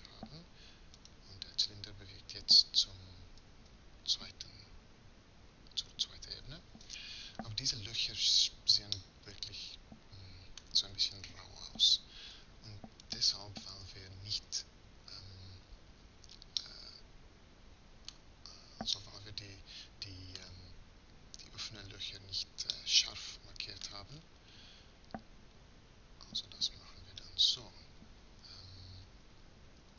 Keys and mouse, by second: 1.7 middle click, 2.3 right click, 3.1 m, 7.5-11.9 middle drag, 14.2 Tab, 22.9 middle click, 24.0-25.7 middle drag, 27.5 z, 29.6 KP_3.